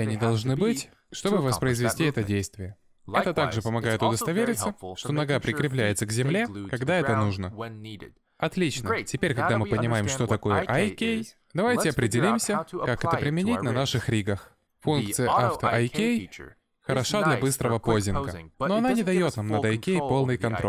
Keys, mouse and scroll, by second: 4.9 middle click, 6.1 middle click, 7.2 a, 7.6 alt+r, 8.1 middle click, 9.3 shift+middle click, 9.9-10.8 scroll up 3, 10.8 ctrl+s, 11.2 shift+middle click, 12.6 middle click, 17.1 click, 17.4 click, 18.1 middle click, 19.2 click, 19.4 click, 19.7 middle click.